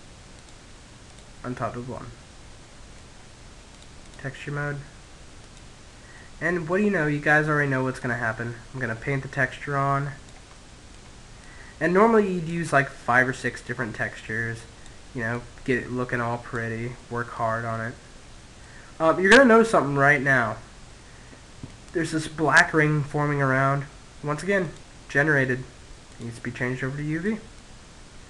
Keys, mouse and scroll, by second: 0.4 middle click, 1.9-4.3 drag, 4.5-6.2 middle drag, 6.3 click, 8.9 middle click, 9.8 click, 11.7-15.4 drag, 15.4-18.1 middle drag, 23.0 click, 25.3 middle click, 26.0 click.